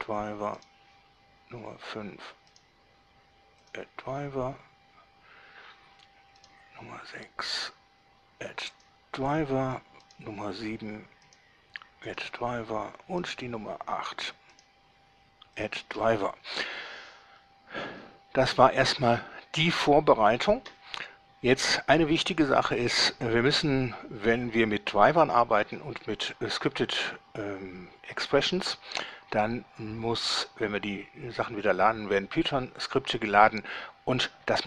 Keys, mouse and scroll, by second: 0.8 right click, 2.8 right click, 3.8 click, 6.6 right click, 7.8 right click, 8.9 click, 10.2 right click, 11.5 right drag, 12.2 click, 13.4 right click, 14.8 right click, 15.8 click, 19.4 scroll down 1, 19.7 scroll up 1.